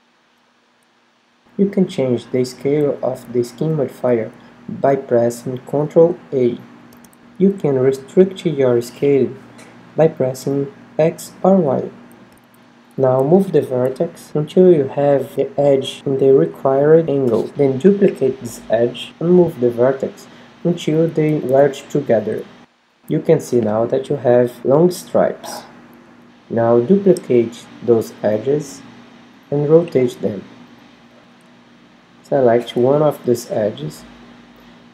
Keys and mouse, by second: 0.9 Tab, 2.0 a, 2.4 a, 3.4 z, 4.5 ctrl+a, 6.9 middle click, 7.2 click, 7.4 z, 8.1 ctrl+a, 9.3 middle click, 11.1-12.7 middle drag, 12.7 Tab, 12.7 KP_7, 12.9 Tab, 13.5-15.5 right drag, 14.4 z, 15.5 g, 17.8 a, 17.8 shift+d, 22.0-24.8 middle drag, 24.8 click, 25.2 right click, 25.3 click, 25.8-27.8 middle drag, 26.8 g, 28.0-29.3 middle drag, 29.3-31.6 drag, 30.5 g, 31.9-33.2 drag, 32.6 a, 33.2 Tab, 33.6 middle click, 33.9 click, 34.0 middle click, 34.5 click, 34.7 middle click.